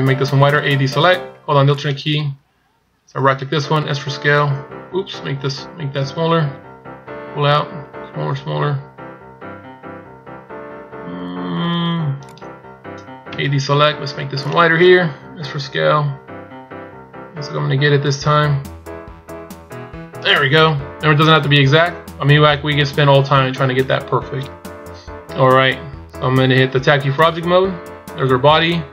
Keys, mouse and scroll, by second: 1.7 alt+right click, 3.8 s, 14.4 alt+right click, 15.5 s, 21.3-24.2 scroll down 4.